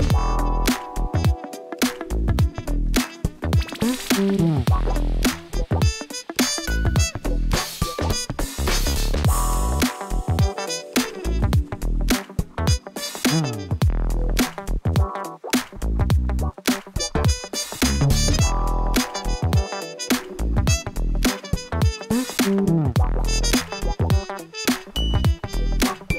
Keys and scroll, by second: 0.8 Tab, 2.6 ctrl+r, 3.2 2, 3.6 Return, 7.8 e, 8.7 Return, 10.8 e, 11.0 2, 11.4 Return, 13.5 1, 13.9 shift+z, 18.6 s, 19.0 y, 19.2 0, 19.5 Return, 23.4 s, 23.7 x, 24.0 0, 24.3 Return, 25.3 shift+z.